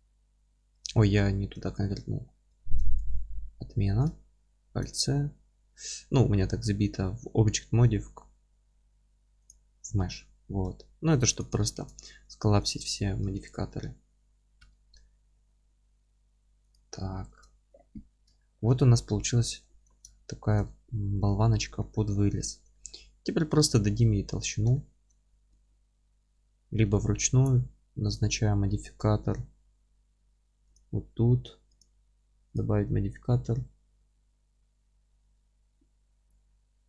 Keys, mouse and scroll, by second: 2.5 ctrl+z, 9.9 Tab, 10.4 1, 11.1 2, 11.4 click, 11.8 ctrl+x, 12.1 1, 12.6 click, 13.1 g, 16.7 click, 16.9-17.3 scroll down 1, 17.3 Tab, 18.0 scroll down 1, 18.3-36.8 alt+middle drag, 19.1 scroll up 1, 19.6 alt+q, 20.7 z, 21.2 scroll up 1, 24.5 scroll down 1.